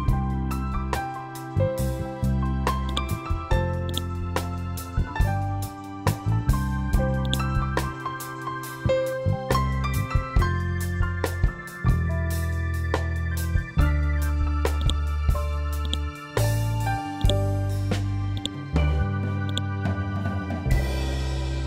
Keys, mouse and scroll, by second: 0.0-1.0 scroll down 1, 2.8 click, 5.3 ctrl+k, 7.1-10.3 drag, 10.3-10.9 scroll down 1, 12.5-13.2 scroll up 1, 14.7-21.6 drag.